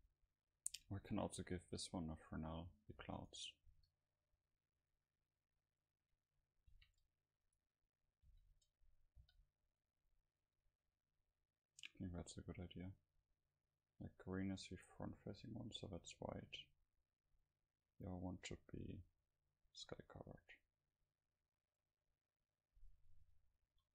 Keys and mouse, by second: 3.2-5.3 right drag, 5.3-9.6 drag, 9.6 ctrl+c, 9.6 ctrl+v, 9.6 g, 14.8-18.9 drag, 21.1-22.9 drag, 23.8 a.